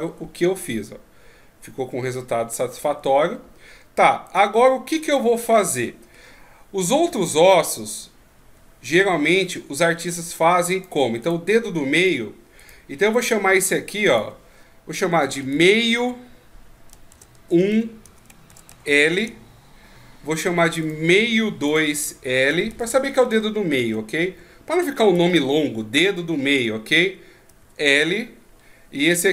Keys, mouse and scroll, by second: 2.7-3.4 scroll up 4, 3.4-4.3 scroll down 1, 4.3 right click, 4.3 scroll down 1, 4.6 Tab, 5.1 middle click, 10.0 right click, 10.7 right click, 11.2 right click, 12.0 right click, 12.6 right click, 13.1 right click, 14.0 click, 20.8 right click, 21.7 click.